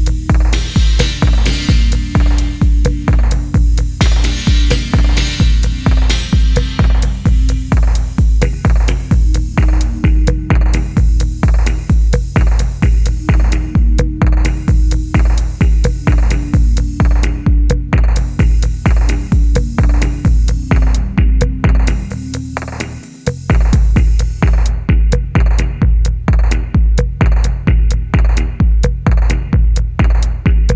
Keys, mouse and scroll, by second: 3.4 middle click, 5.3 typing, 5.6 middle click, 6.3-6.8 typing, 6.9 shift+middle click, 8.1-8.7 shift+scroll up 2, 14.7-15.9 scroll up 1, 15.9 double click, 16.0 1, 16.1 double click, 16.5 middle click, 20.2 middle click, 21.5 shift+middle click.